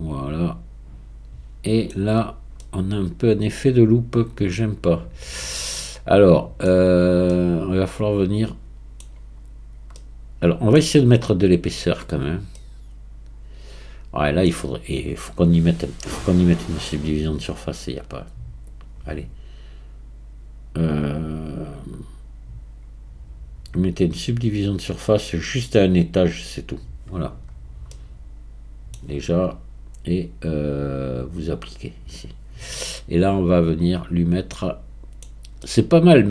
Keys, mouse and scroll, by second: 35.1-35.7 scroll up 1.